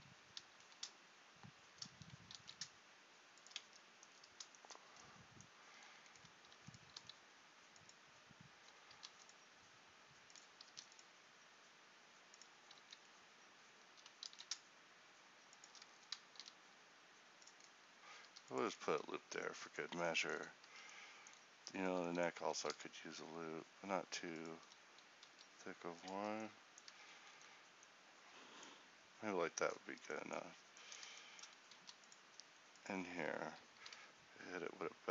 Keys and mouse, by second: 0.5 alt+s, 3.7 Tab, 6.6 e, 7.0 s, 8.9 ctrl+r, 12.9 alt+s, 16.4 ctrl+r, 19.0 Tab, 19.2 middle click, 20.8 Tab, 22.5 e, 22.8 s, 24.7 e, 26.2 Tab, 27.0 Tab, 31.8 ctrl+r, 33.9 ctrl+b.